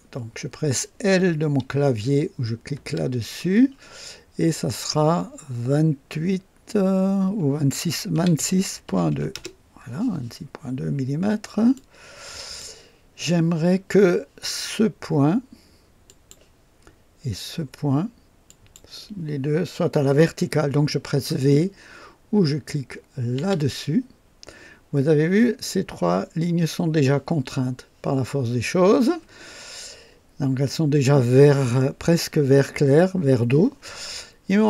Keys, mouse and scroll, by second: 2.7 l, 8.1-9.3 typing, 9.3 KP_Enter, 9.3 Return, 11.7-12.8 drag, 16.0 click, 18.4 click, 23.3 v.